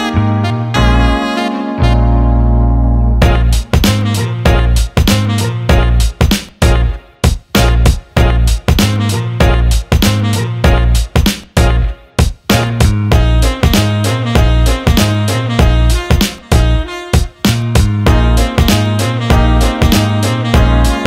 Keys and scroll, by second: 1.7 ctrl+z, 12.0 Escape.